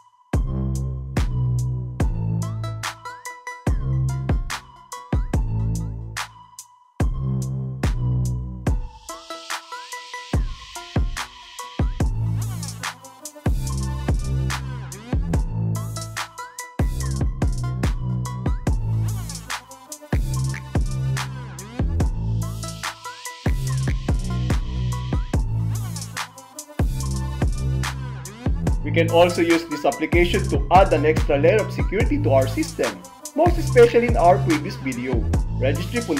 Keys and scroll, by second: 0.2 Return, 2.2 alt+e, 4.2 alt+a, 6.2 super+r, 7.3 Return, 9.3 Return, 11.3 alt+d, 13.7 alt+a, 15.7 super+r, 16.7 Return, 20.2 Return, 22.2 alt+c, 23.4 alt+a, 24.2 Return.